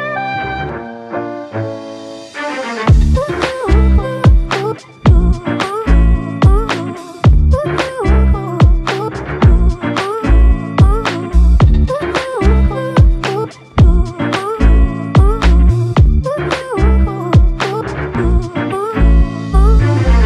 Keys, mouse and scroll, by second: 5.6 ctrl+click, 9.5 ctrl+alt+click, 12.0 ctrl+click.